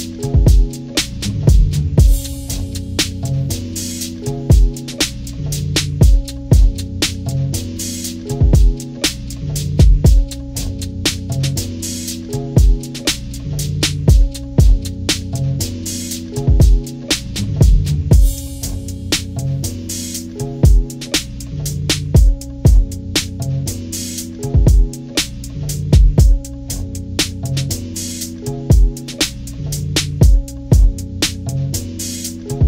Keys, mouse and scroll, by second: 1.9 right click, 4.0 click, 5.5-7.6 drag, 9.9-10.9 drag, 10.9 right click, 11.8 click, 12.3 click, 13.5 Delete, 15.1 scroll up 2, 17.0 ctrl+-, 17.3 ctrl+=, 17.9 ctrl+=, 18.3 scroll down 2, 18.5 scroll up 2, 18.7 ctrl+=, 19.5 scroll up 2, 20.8 click, 22.9 shift+click, 23.9 shift+click, 25.2 shift+click, 26.7 click, 30.3 click, 31.3-32.6 drag.